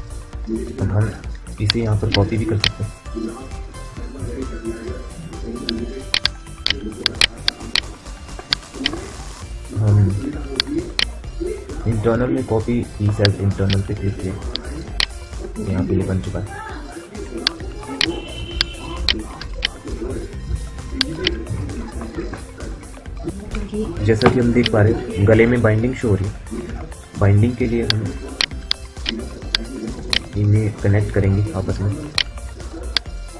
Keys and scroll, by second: 4.1 q, 4.9 w, 19.9 Delete, 21.0 Delete, 23.4 F9.